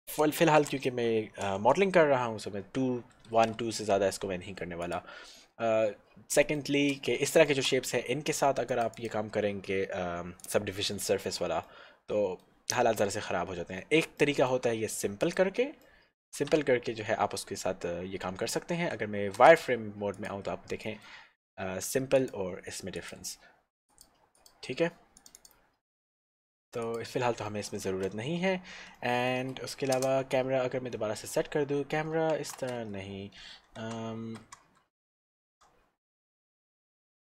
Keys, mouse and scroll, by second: 0.9 2, 1.9 Return, 3.5 shift+z, 5.1 click, 5.6-6.1 scroll down 1, 6.4 shift+middle click, 8.8 middle click, 9.1 click, 11.7 middle click, 14.4 shift+middle click, 15.5 click, 16.0 middle click, 16.5 Tab, 19.7 z, 20.3 click, 21.1 middle click, 22.4 click, 26.9 click, 27.7 middle click, 28.0 shift+z, 28.7 scroll down 1, 29.0 shift+middle click, 30.2 middle click, 31.3 scroll up 1.